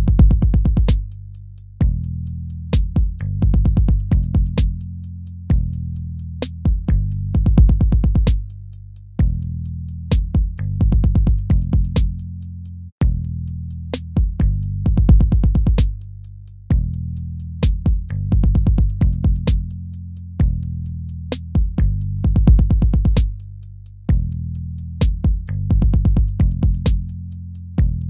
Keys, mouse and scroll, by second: 3.7 ctrl+-, 19.6 ctrl+-, 19.9 ctrl++, 20.2 ctrl+-, 20.4 ctrl+-.